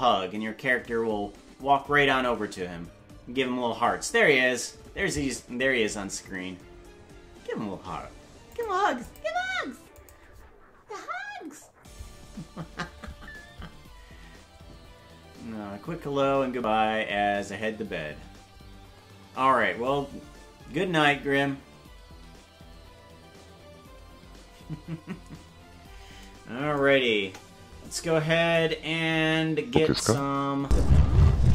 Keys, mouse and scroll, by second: 27.2 KP_0, 28.6-30.2 drag, 30.6 space.